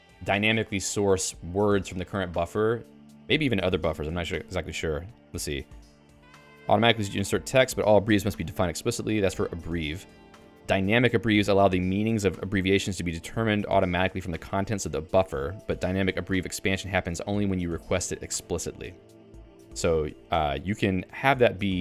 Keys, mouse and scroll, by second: 19.1 l, 20.1-21.4 j, 21.6 j.